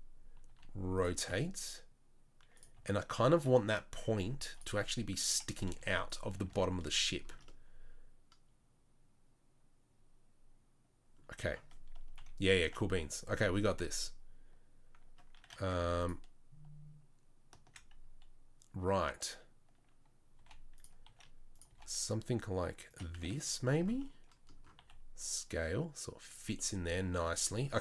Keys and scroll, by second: 0.5 r, 1.1 g, 2.7 s, 4.0 r, 5.7 z, 6.4 z, 12.1 KP_3, 12.6 z, 20.3 g, 21.0 s, 21.7 g, 23.2 z, 24.7 s, 27.7 Tab.